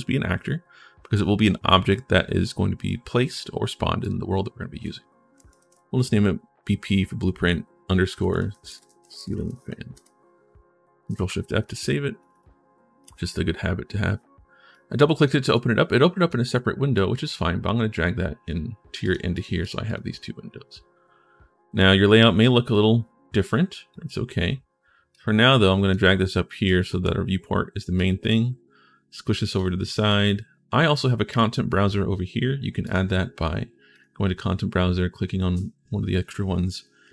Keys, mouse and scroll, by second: 7.7-9.8 typing, 10.9 ctrl+shift+s, 12.0 click, 12.1 click, 19.1 click, 19.6 click, 22.2-23.7 drag, 24.9 click, 26.4 right click, 27.8-29.4 drag, 27.8-29.4 right drag, 29.9 right click, 32.6 click, 33.7 click, 36.9 click.